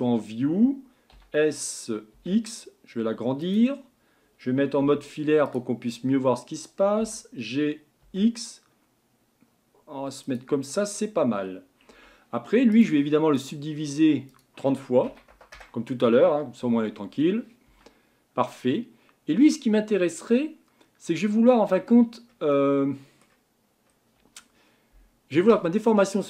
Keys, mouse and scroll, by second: 1.1 s, 4.8 z, 5.8-6.5 scroll down 2, 7.0 g, 10.8-11.4 scroll up 2, 11.4-11.8 scroll down 1, 11.9 Tab, 12.7-14.3 right drag, 14.3-16.6 drag, 16.6 Tab, 17.7 Tab, 18.6-22.0 middle drag, 22.0-22.3 scroll up 2, 22.5-23.6 middle drag, 23.6-26.2 scroll down 1.